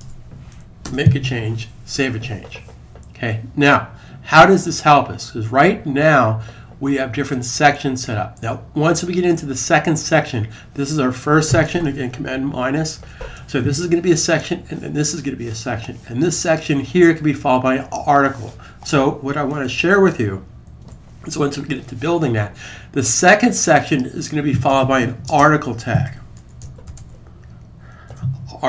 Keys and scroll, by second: 0.0-0.3 typing, 0.6 super+s, 12.3 super+-, 12.8 super+-, 20.6 alt+super+1, 25.0-28.6 typing.